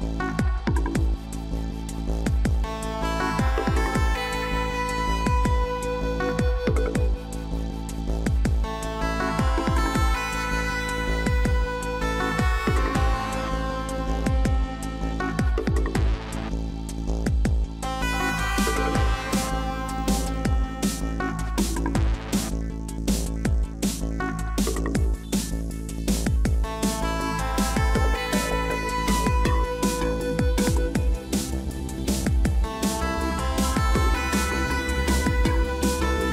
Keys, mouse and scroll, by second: 5.6 ctrl+z.